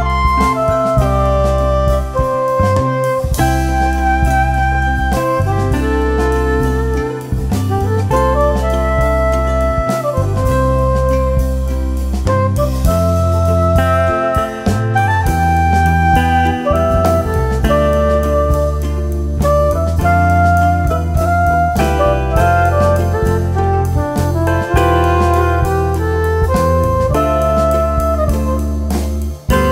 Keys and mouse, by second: 0.7-2.1 typing, 1.8 click, 2.8 click, 4.2-5.8 typing, 4.3 click, 5.0 click, 5.9 click, 7.2-11.0 typing, 7.2 click, 8.3 click, 9.0 click, 10.1 click, 12.6 click, 12.7-15.3 typing, 13.5 click, 15.4 click, 16.6 typing, 16.9 click, 18.1 ], 18.2 click, 18.3 space, 18.4 click, 19.1 ], 19.1 click, 20.7 z, 20.9 click, 21.7-25.6 typing, 21.9 click, 22.4 click, 24.2 click, 25.5 click, 26.7 typing, 26.8 click.